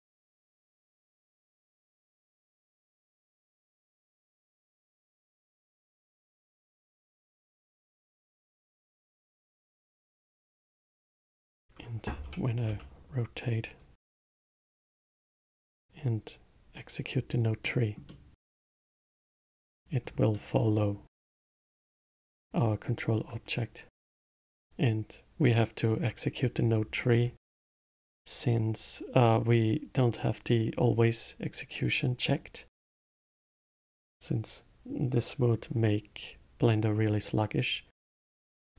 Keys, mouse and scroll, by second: 2.5 click, 4.6 click, 5.5-7.2 drag, 7.2-7.8 scroll up 5, 7.8 click, 8.9-10.4 middle drag, 10.4 click, 12.2 r, 15.1-17.6 drag, 17.6-19.5 middle drag, 19.5-20.0 scroll up 1, 20.0 scroll down 1, 20.3-20.8 middle drag, 20.8-21.1 scroll up 1.